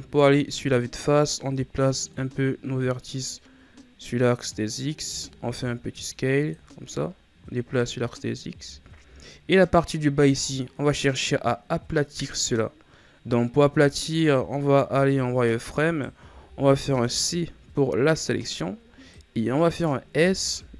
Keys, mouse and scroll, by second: 2.1-5.0 drag, 5.0 s, 7.5-8.7 drag, 8.7 scroll down 4, 9.1 scroll up 2, 9.9-10.4 scroll up 2, 14.0 right click, 14.9 z, 15.8 right click, 16.2 c.